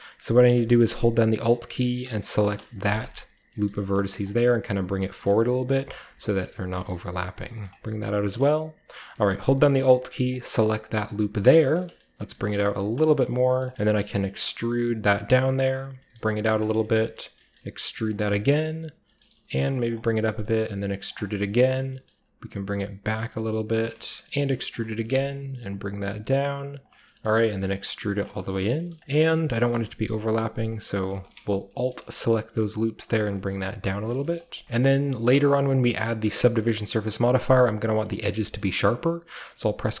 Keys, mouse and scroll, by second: 3.4-4.9 scroll down 1, 3.5-6.7 middle drag, 3.7-4.5 typing, 4.9 click, 6.5-7.9 typing, 6.8 middle click, 8.1 click, 12.1 middle click, 12.1-14.3 typing, 15.7 click, 16.0 typing, 16.1-16.7 scroll up 1, 16.5 click, 16.7-18.1 scroll down 1, 17.4 typing, 18.1 click, 19.2 typing, 19.8 click, 20.4 typing, 21.1 click, 21.8 typing, 23.7 click, 24.3-25.1 typing, 24.7 shift+click, 27.6 typing, 28.1 click, 28.6-29.0 scroll down 1, 29.5 typing, 30.7 click, 31.6 typing, 33.0 click, 33.2 scroll down 1, 33.3-34.1 scroll up 1, 34.1 shift+middle click, 34.1-35.6 scroll up 1, 34.4-36.2 typing, 34.8-37.8 shift+middle drag, 35.6-37.8 shift+scroll up 1, 38.4-40.0 shift+middle drag, 38.6-39.5 shift+scroll up 1, 39.5-40.0 shift+scroll up 1, 39.6 ctrl+r.